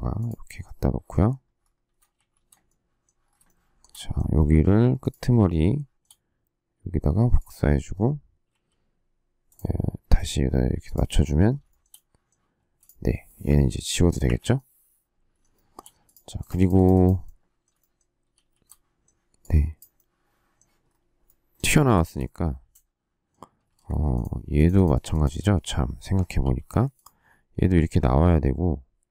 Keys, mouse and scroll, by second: 2.1 shift+z, 3.4 shift+middle click, 8.4 q, 11.6 shift+middle click, 12.5 space, 14.2 Delete, 15.5 shift+middle click, 17.7 shift+middle click, 17.8 shift+scroll, 17.9 shift+middle click, 18.3 shift+s, 18.6 shift+middle click, 21.9 shift+middle click, 23.6 space, 23.9 Escape, 26.4 p.